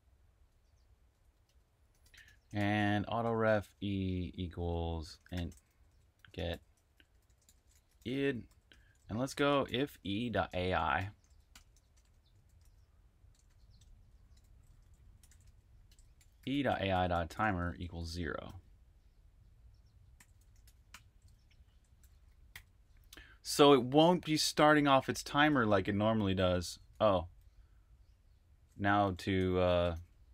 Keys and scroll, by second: 0.3 Escape, 1.3-3.6 typing, 5.9-21.0 typing, 22.2-23.6 typing, 29.0-30.3 typing.